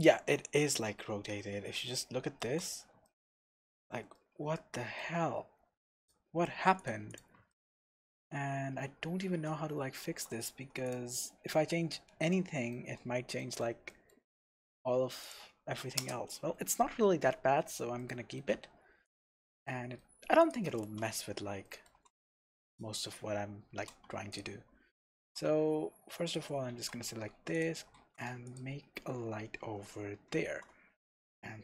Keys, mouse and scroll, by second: 0.0-0.7 scroll down 1, 0.7 KP_1, 1.5-2.0 scroll up 2, 2.8 scroll up 2, 6.0 click, 6.8 click, 7.1 click, 7.5-10.8 shift+middle drag, 8.4-9.6 scroll down 2, 9.6-9.9 scroll up 2, 10.4-10.8 scroll up 2, 10.8 click, 12.3-15.2 shift+middle drag, 14.7-15.2 scroll down 2, 15.2 click, 16.0 KP_0, 16.9-17.3 scroll down 1, 17.3-18.0 scroll up 1, 18.0-19.0 shift+middle drag, 19.0 click, 19.6-20.4 shift+middle drag, 20.4 click, 20.8 Tab, 21.2-21.6 scroll up 2, 21.6 shift+middle click, 22.4 3, 22.7 click, 23.0-23.3 scroll down 1, 24.3 click, 24.7-25.4 scroll down 1, 25.4 Tab, 25.8-26.2 scroll up 1, 26.2 click, 26.7 Tab, 27.1 scroll up 1, 27.3 3, 27.5 click, 27.9 shift+s, 28.9 Tab, 29.6-30.4 scroll up 2, 30.4 shift+a.